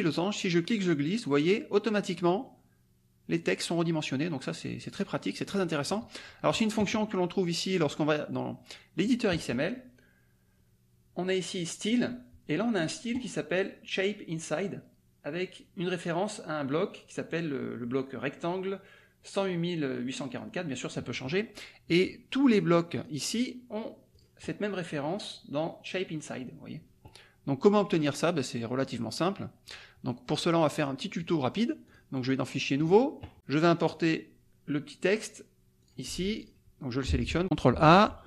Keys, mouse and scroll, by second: 0.2-6.0 drag, 7.7 click, 8.9 click, 11.8 click, 22.5 click, 22.9 click, 24.1 click, 29.7 click, 30.7 click, 31.2 click, 31.8 click, 32.8 click, 35.8 click, 36.3 click, 37.1 ctrl+a.